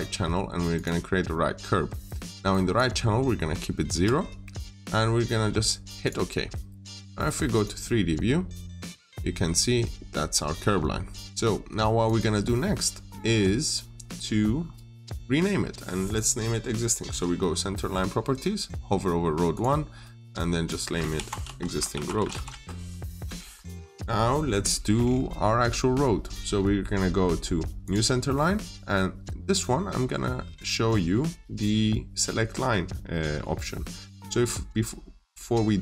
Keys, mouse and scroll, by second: 3.8 0, 5.9 click, 8.1-8.8 scroll up 1, 8.8 middle click, 11.9 click, 12.5-13.0 scroll up 1, 13.0 middle click, 14.5-15.9 scroll down 1, 15.9 click, 18.9-19.4 scroll up 1, 19.4 click, 21.0-22.6 typing, 23.4-24.3 scroll down 1, 24.6 middle click, 25.1 scroll down 1, 25.3 middle click, 27.7 middle click, 27.7 click, 29.6 scroll down 1, 30.7 middle click, 31.4 scroll up 1, 33.0 middle click.